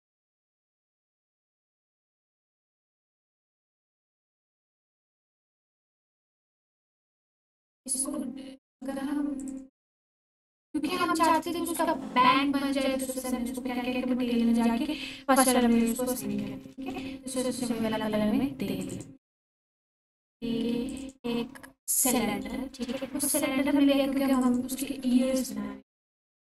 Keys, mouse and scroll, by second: 0.0 click, 0.7 ctrl+1, 2.2 ctrl+1, 3.2 1, 3.9 click, 4.7 Tab, 5.5-7.3 scroll up 1, 7.7 click, 11.4-12.7 scroll up 1, 14.7-15.6 scroll down 1, 15.6 Tab, 16.7 shift+a, 18.8 click, 19.2-19.9 scroll down 1, 19.7-20.6 typing, 20.9-22.8 drag, 22.5-23.6 typing, 24.3 click, 24.9 g, 26.1 x.